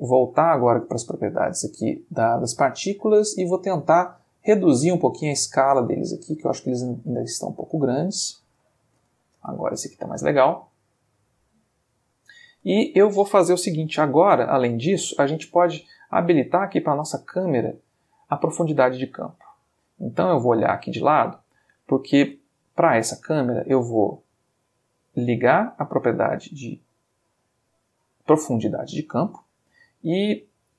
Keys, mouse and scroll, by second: 0.6 click, 3.8 click, 5.0-8.1 drag, 8.6 space, 12.5 space, 16.9 click, 20.4 click, 23.1 click, 25.4 click.